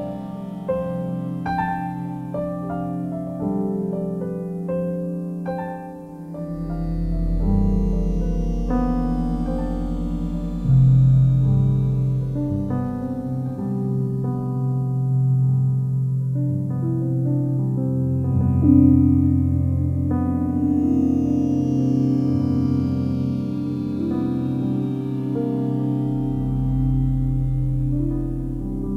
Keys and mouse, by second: 3.3 typing, 4.1 ctrl+alt+click, 4.4-5.4 ctrl+alt+shift+drag, 5.6 typing, 7.2 click, 8.0 typing, 10.2-12.4 drag, 12.9 typing, 13.5-15.3 alt+drag, 14.9-15.6 typing, 16.3-17.8 alt+drag, 18.9 s, 19.1 x, 19.3 x, 20.7 Escape, 22.0-25.0 alt+drag, 27.4 1, 28.4 click.